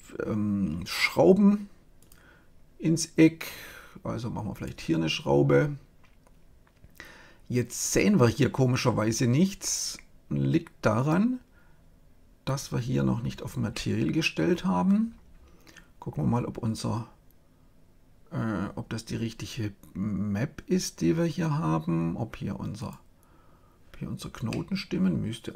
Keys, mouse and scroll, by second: 1.9-3.6 drag, 4.4 click, 10.9-12.6 drag, 13.7-17.8 middle drag, 17.8-22.0 scroll up 1, 22.7-24.4 drag, 24.4 middle click, 24.6 click, 24.6-25.5 middle drag.